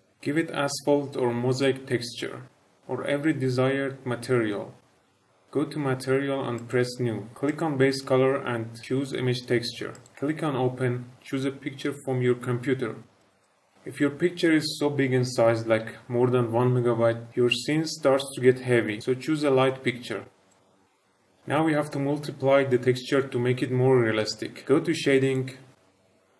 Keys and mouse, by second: 6.5-7.1 drag, 7.4-10.1 drag.